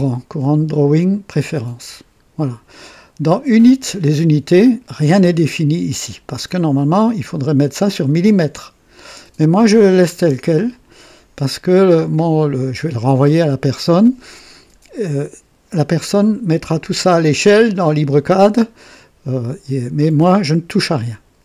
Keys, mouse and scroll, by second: 1.8 click, 3.6 click, 6.5 click, 10.5 click, 20.8 click.